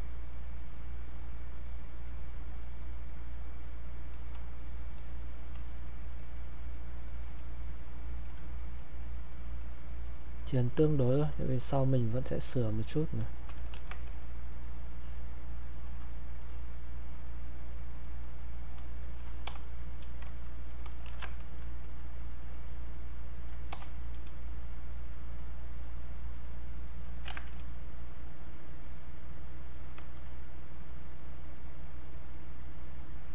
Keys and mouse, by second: 4.9 click, 6.1 click, 7.4-13.1 alt+drag, 13.7 ctrl+shift+1, 14.5-18.0 drag, 21.0 ctrl+shift+1, 21.3-27.2 shift+drag, 27.2 ctrl+z, 27.5-29.7 drag, 33.2 click, 33.2-33.3 drag.